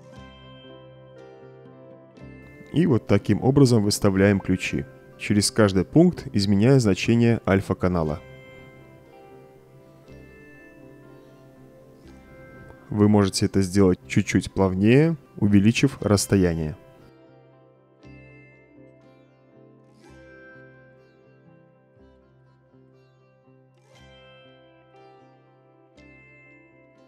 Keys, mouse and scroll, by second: 0.0 click, 0.6 middle click, 1.7-2.3 drag, 2.9-3.3 drag, 4.5-4.8 drag, 5.8-6.2 drag, 6.6 Return, 7.0 click, 7.8 Return, 8.3 click, 9.5 click, 10.1 click, 11.0 click, 11.5 click, 11.8 Return, 12.4 drag, 13.6 drag, 15.9-17.2 drag, 17.8 space, 23.2 space, 25.1 space, 26.3 click.